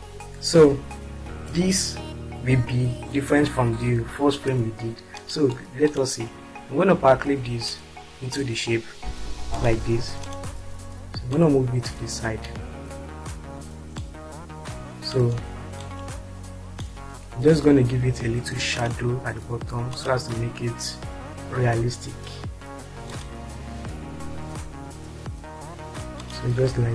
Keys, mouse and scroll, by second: 5.1 click, 6.6 click, 7.8 ctrl+click, 9.5 click, 10.4 ctrl+click, 11.8 ctrl+click, 14.1 click, 14.4 click, 15.8 click, 19.2 click.